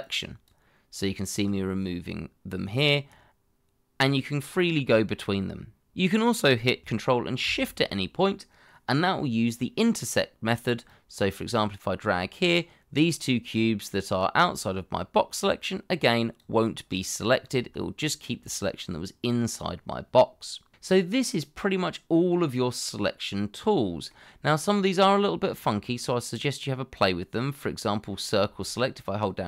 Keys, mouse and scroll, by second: 0.0 ctrl+click, 10.9 ctrl+shift+click, 21.6 middle click, 29.2 shift+click.